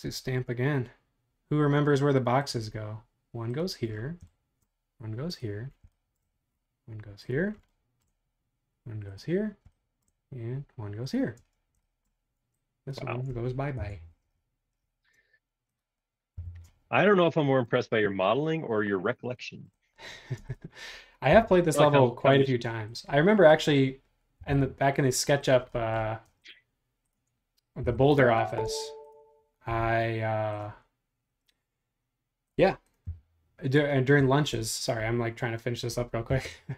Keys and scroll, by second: 0.0 ⟲, 11.4 space, 13.8 BackSpace, 16.3 m, 20.3 space, 21.3 m, 24.4 m, 26.3 space, 27.8 m, 28.6 space, 29.7 m, 33.0 Up.